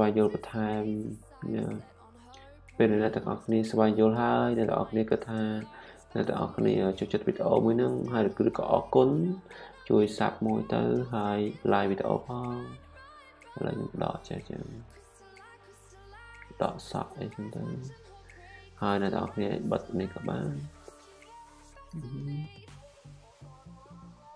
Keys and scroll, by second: 9.8-11.4 typing.